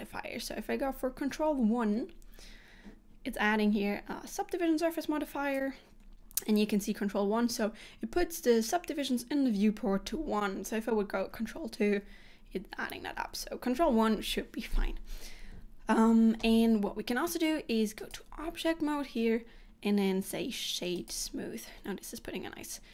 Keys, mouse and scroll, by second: 1.7 ctrl+1, 4.4 click, 11.3 ctrl+2, 13.5 ctrl+1, 18.1 click.